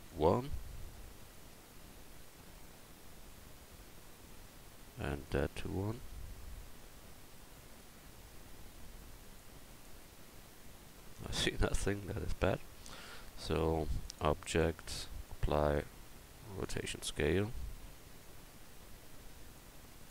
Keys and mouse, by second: 5.3-7.0 drag, 12.0 Tab, 12.6 Tab.